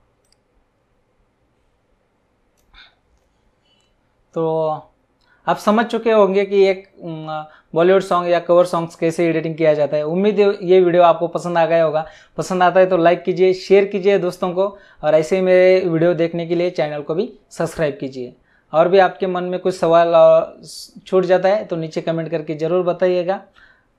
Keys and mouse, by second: 0.2 click.